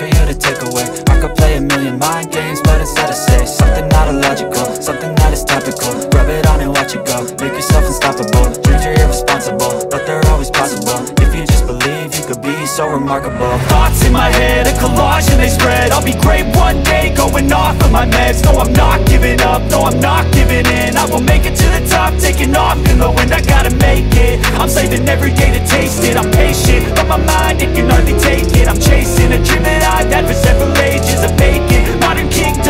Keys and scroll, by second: 0.0 F3, 3.3 ctrl+r, 4.2 t, 7.6 shift+F2, 10.0 F3, 10.4 Escape, 11.0 F3, 13.8 Escape, 14.2 F2, 15.2 F3, 22.0 shift+F2, 22.3 F3, 23.8 Escape, 26.8 Escape, 27.9 F2, 30.2 F3.